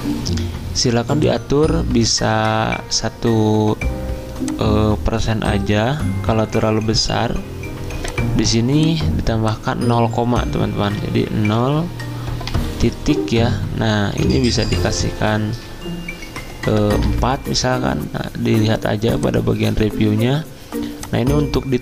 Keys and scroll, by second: 2.4 1, 10.8 BackSpace, 11.5 0, 12.4 ., 14.1 Delete, 17.0 4.